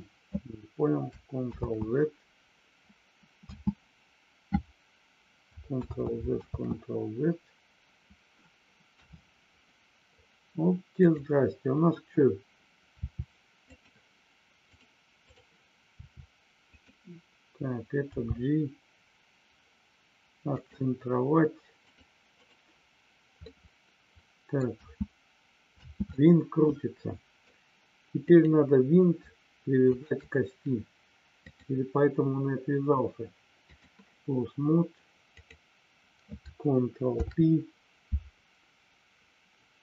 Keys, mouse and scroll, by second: 3.4 space, 5.9 ctrl+z, 8.9 KP_3, 11.1 click, 13.5 click, 16.7 click, 20.5 click, 22.3 click, 23.4-24.5 middle drag, 24.7 space, 26.2-27.4 middle drag, 28.2 click, 29.9 shift+click, 31.4-33.8 drag, 35.3 click.